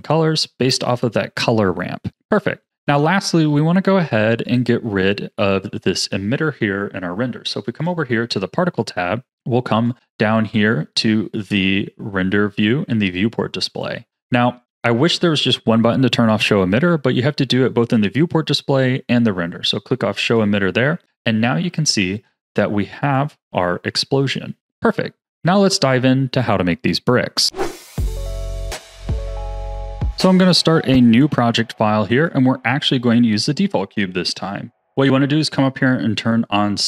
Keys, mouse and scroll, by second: 2.7-4.4 scroll up 2, 4.4 click, 5.5-7.7 shift+middle drag, 7.7 click, 9.2-12.7 drag, 13.6-14.6 drag, 14.6-14.9 scroll down 6, 20.2 click, 21.0-21.5 scroll down 9, 21.6 a, 22.0-23.1 middle drag, 23.1-25.4 drag, 32.1 click.